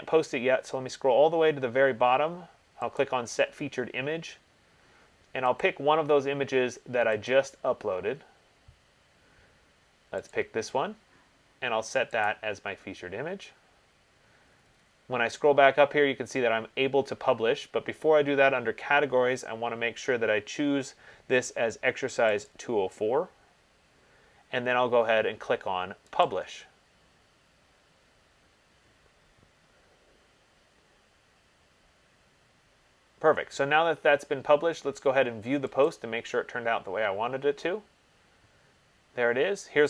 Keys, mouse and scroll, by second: 0.0-3.1 scroll, 3.1 scroll, 3.3 click, 5.8 click, 7.5 click, 10.6 click, 12.5 click, 14.6-17.4 scroll, 19.2-20.8 scroll, 22.7 click, 26.5 click, 36.1 click.